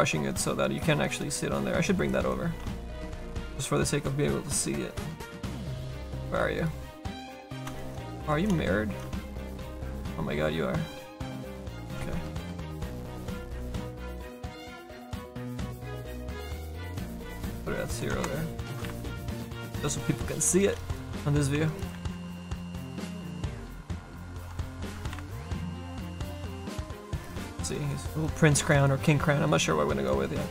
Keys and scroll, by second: 7.7 space, 8.7 a, 9.3 space, 10.1 a, 11.8 ctrl+d, 12.0 a, 14.9 a, 18.7 KP_Subtract, 18.9 KP_9, 21.9 a, 23.9 space, 24.9 KP_Multiply.